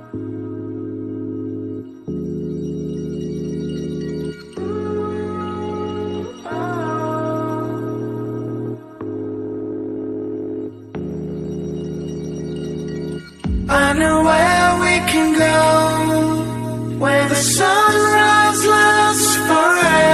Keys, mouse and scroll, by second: 1.3 shift+d, 3.9 click, 4.5 g, 6.5-6.9 scroll down 1, 6.9 click, 7.5 click, 8.2 drag, 8.5-9.2 scroll up 2, 9.2-10.3 scroll down 1, 10.9 shift+a, 14.4 KP_1, 15.1 g, 16.5 click, 17.2-19.1 drag, 19.6 drag, 19.9-20.1 scroll up 2.